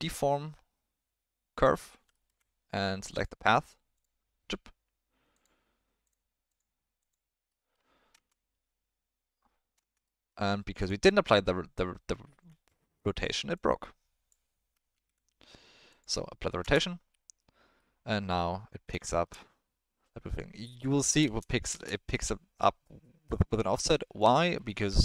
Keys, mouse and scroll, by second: 2.1 ctrl+middle click, 3.1 click, 5.3-6.1 drag, 6.5-7.1 drag, 7.5 middle click, 8.1 space, 9.8 space, 10.0 middle click, 13.5 click, 14.9 ctrl+a, 16.6 space, 17.9-18.8 middle drag, 19.1 shift+middle click, 21.0 middle click, 21.5 middle click, 21.7 space, 22.5-24.2 drag, 24.7 alt+middle click.